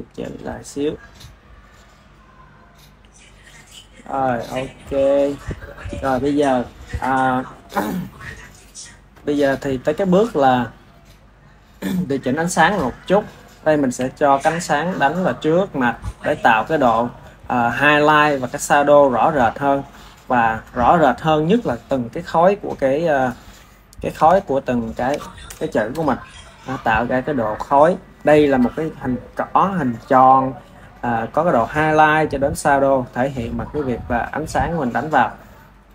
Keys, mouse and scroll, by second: 0.3 r, 1.7 drag, 2.3 click, 2.9 g, 3.7 drag, 5.8 ctrl+s, 8.2 ctrl+s, 11.2-13.1 ctrl+middle drag, 13.1 drag, 13.9 r, 23.2-25.3 middle drag, 25.3 KP_0.